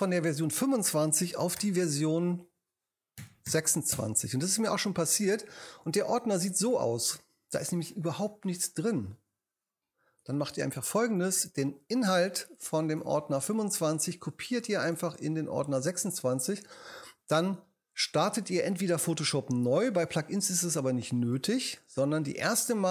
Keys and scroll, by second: 1.6 shift+super+n, 3.2 2, 3.5 6, 3.9 Return.